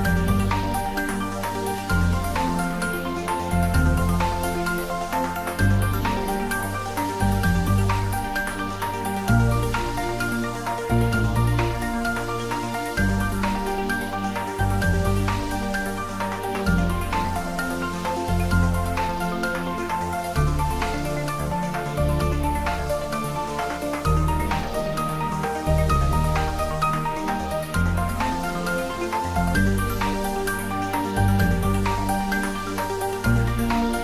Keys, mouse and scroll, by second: 2.4 middle click, 2.5 shift+z, 3.8-4.4 scroll up 1, 4.4-4.8 scroll down 1, 7.2 Tab, 7.7 click, 8.9 2, 9.4 click, 10.0 alt+shift+click, 13.2 alt+shift+click, 16.9-17.4 scroll up 1, 18.0 ctrl+b, 23.0 click, 23.9 ctrl+z, 24.3-24.8 scroll down 1, 24.8 middle click, 25.9-26.8 scroll up 1, 27.6 scroll down 1, 29.4 click, 33.0 s.